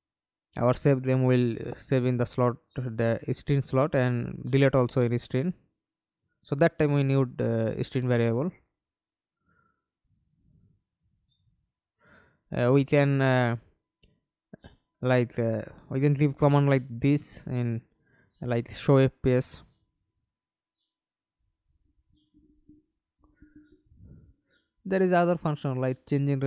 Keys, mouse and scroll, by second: 0.2 alt+click, 5.6 double click, 6.1 middle click, 6.8 F11, 7.5 alt+p, 10.9-12.1 typing, 12.5 Up, 12.6 Up, 13.0 Up, 14.7 Return, 19.3 Escape, 20.5 F11, 25.1-26.4 typing.